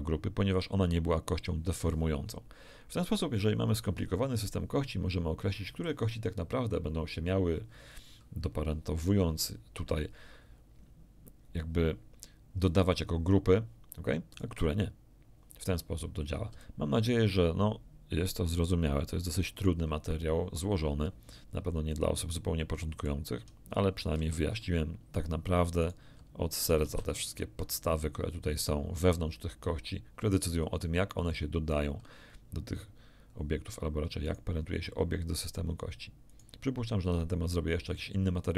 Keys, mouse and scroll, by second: 14.3 right click, 16.5 d, 16.5-19.8 right drag, 16.7 d, 21.3 middle click, 21.3-21.7 scroll down 1, 21.9-23.2 shift+middle drag, 24.1 alt+r, 25.7 right click, 26.6 alt+a, 26.8 alt+a, 27.2 alt+r, 34.2 right click, 36.3 right click.